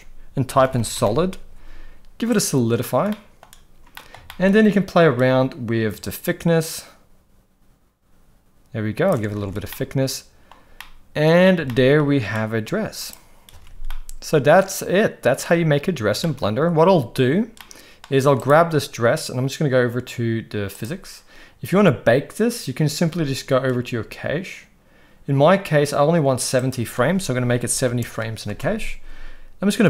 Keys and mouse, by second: 3.1-3.4 middle drag, 3.9 middle click, 4.2 shift+middle drag, 6.1-9.1 shift+drag, 9.4 alt+a, 9.7-10.5 middle drag, 10.8-11.4 middle drag, 11.6-12.0 shift+middle drag, 13.0 click, 13.5 alt+a, 13.5 ctrl+s, 13.8-15.4 middle drag, 16.2 shift+middle drag, 17.6-18.0 middle drag, 18.4 click, 20.7 click, 26.7-28.6 drag.